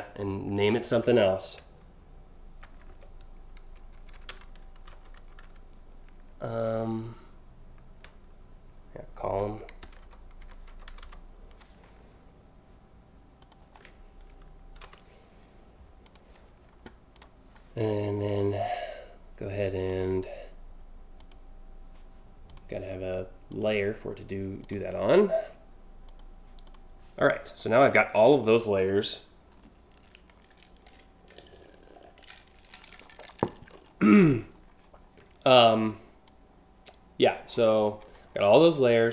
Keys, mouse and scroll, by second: 2.3 shift+b, 3.6-5.3 typing, 9.2-10.9 typing, 13.0 click, 14.4 Delete, 14.5 e, 15.6 click, 16.7 click, 18.3 click, 19.4 click, 20.8 click, 22.1 click, 23.1 click, 24.2 click, 25.7 click, 26.3 click, 27.9 click, 35.8-36.8 drag, 37.1 scroll down 3, 37.6 scroll up 1, 37.9 3.